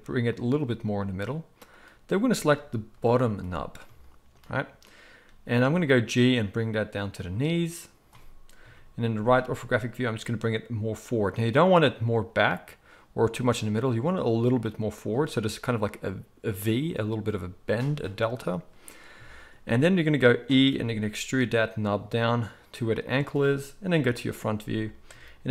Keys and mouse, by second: 2.9 KP_1, 5.2 g, 5.9-8.6 middle drag, 8.6 KP_3, 9.5 g, 20.7 e, 23.9 KP_1, 24.7-25.5 shift+middle drag.